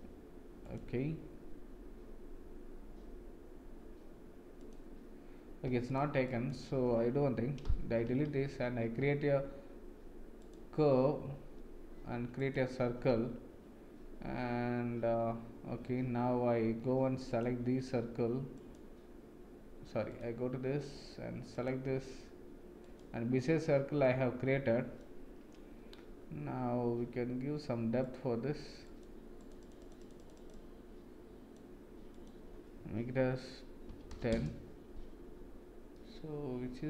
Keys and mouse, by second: 0.6 click, 5.8 click, 6.4 click, 7.6 Delete, 8.2 shift+a, 17.3 click, 20.1 click, 21.5 click, 24.0 middle click, 28.1 click, 29.4 click, 29.6 click, 29.8 click, 30.0 click, 30.2 click, 30.3 click, 32.1-34.9 drag, 35.9-36.8 middle drag.